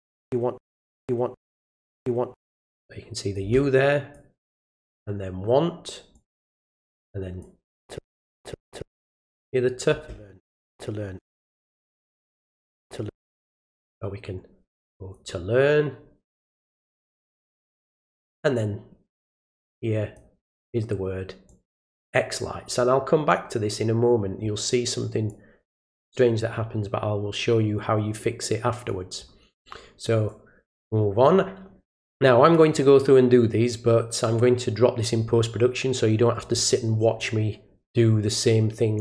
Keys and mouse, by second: 2.8 click, 4.1 click, 6.1 click, 7.4 click, 9.2 click, 11.8-12.7 drag, 13.9-15.1 drag, 16.7-18.3 drag, 19.4 click, 21.5 click, 25.3-28.9 drag, 30.3-31.2 drag, 37.2-39.0 drag.